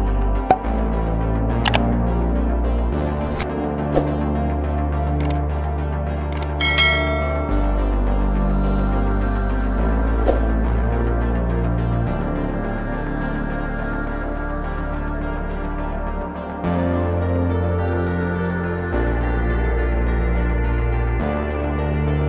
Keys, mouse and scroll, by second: 0.4 click, 1.6-3.9 drag, 5.0-6.0 drag, 6.8 click, 7.1 click, 9.8 KP_Divide, 10.0 KP_Divide, 12.2 click, 13.3-15.4 drag, 19.1 click, 21.3 click, 21.8 click.